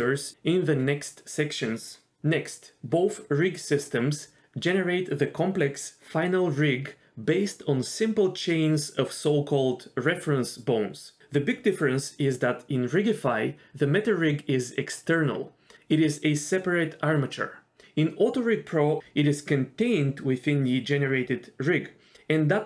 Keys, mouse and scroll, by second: 3.7 click, 4.3 click, 4.9 l, 8.4 g, 9.7 scroll up 1, 9.7 s, 10.2 s, 11.0 s, 12.2 click, 12.3 g.